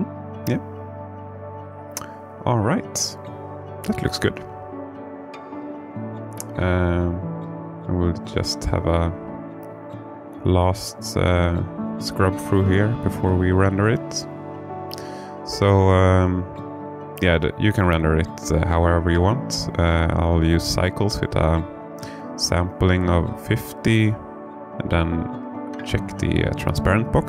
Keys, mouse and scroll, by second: 2.9 click, 7.2-8.7 drag, 11.8-13.2 drag, 15.6 click, 19.3 click, 20.4 click, 22.5 click, 23.7 click, 25.6 click.